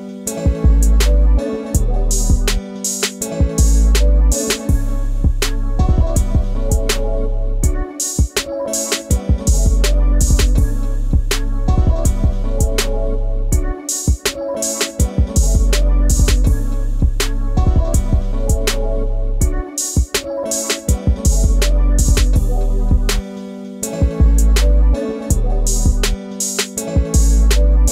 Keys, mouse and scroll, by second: 0.7-3.3 middle drag, 3.3-4.2 scroll up 3, 4.2 middle click, 4.5 Tab, 5.0-6.3 middle drag, 6.3 click, 7.6 click, 8.2 a, 8.9 shift+click, 10.4 x, 11.0 click, 11.3-12.5 middle drag, 12.5 click, 14.5 click, 14.9 scroll down 1, 15.0-17.0 scroll up 11, 17.3 a, 18.0 g, 21.2 s, 24.0 g, 27.1 middle click, 27.6 click.